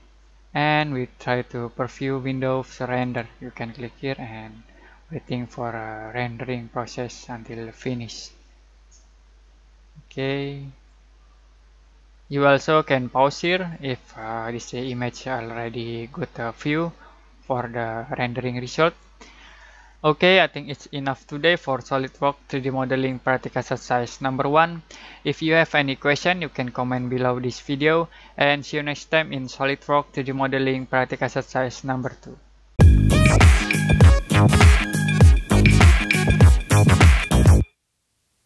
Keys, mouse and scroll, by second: 3.0 click.